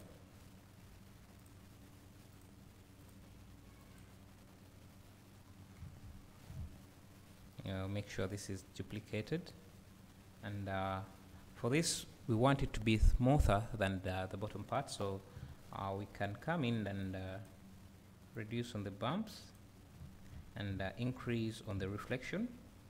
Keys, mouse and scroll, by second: 0.2 click, 1.5 click, 2.6-4.8 drag, 6.6 `, 9.2 click, 12.0 scroll up 1, 14.2 scroll down 1, 17.0 click, 18.5-22.8 drag, 20.0 `.